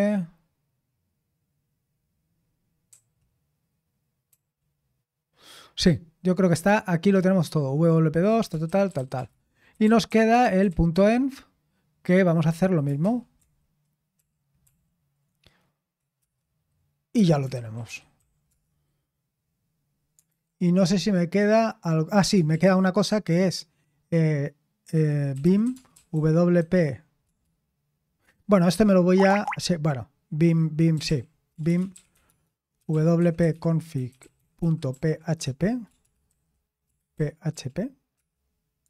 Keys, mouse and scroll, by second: 8.9 ctrl+d, 9.2 ctrl+d, 9.5-11.4 typing, 13.0 typing, 14.2 typing, 14.6 ctrl+p, 16.2 ctrl+p, 17.1 ctrl+p, 17.3-18.0 typing, 20.3 typing, 22.5 s, 25.2-37.5 typing, 38.1 Return.